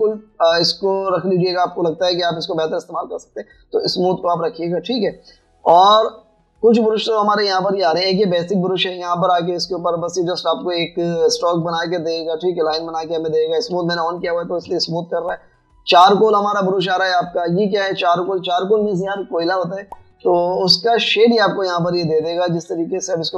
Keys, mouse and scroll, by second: 11.4 typing, 12.5 typing, 13.8 typing, 21.8 typing.